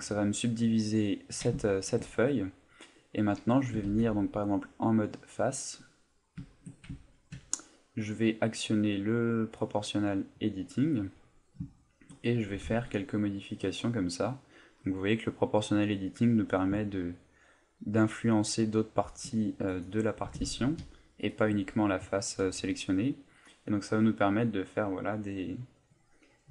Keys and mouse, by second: 0.3 middle click, 1.0 middle click, 1.6 shift+middle click, 1.8 shift+middle click, 2.5 middle click, 3.8 ctrl+Tab, 5.2 right click, 5.8 middle click, 6.5 shift+middle click, 7.0 ctrl+middle click, 9.7 click, 10.8 middle click, 12.4 g, 19.2 shift+click, 19.7 right click, 20.2 g, 21.4 shift+click, 22.7 middle click, 24.4 right click, 24.9 middle click, 25.6 right click.